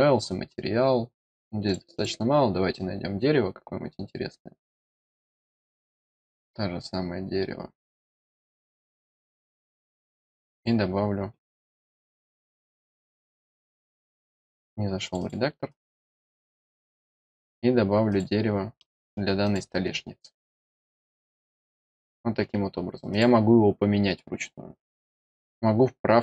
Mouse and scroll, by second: 0.7-1.2 scroll up 2, 1.6 click, 1.9 click, 6.1 scroll up 1, 6.3 middle click, 6.6 middle click, 8.2 click, 9.6 click, 10.4 click, 11.7 click, 11.9 click, 14.2 click, 15.0 click, 15.6 click, 15.9 click, 17.2 click, 18.0 click, 18.7 middle click, 19.4 click, 20.4 click, 21.2 click, 22.7 scroll down 1, 23.0 click, 25.0 click.